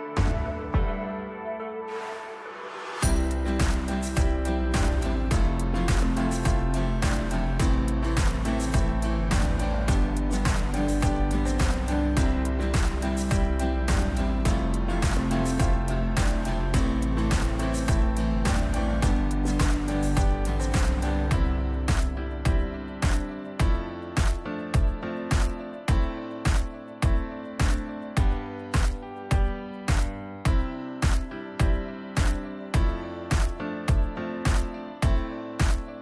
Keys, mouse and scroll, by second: 2.2 click, 11.5 click, 16.6 click, 19.0 click, 21.3 click, 23.2 click, 25.7 click.